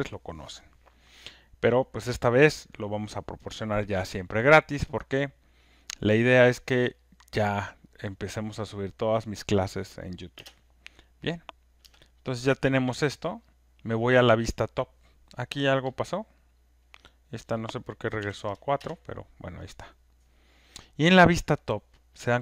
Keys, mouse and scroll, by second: 11.4 click, 11.4 space, 12.1 space, 13.5 click, 13.5 space, 16.0 click, 16.0 space, 17.0 click, 18.8 Return, 21.2 4, 22.1 KP_4.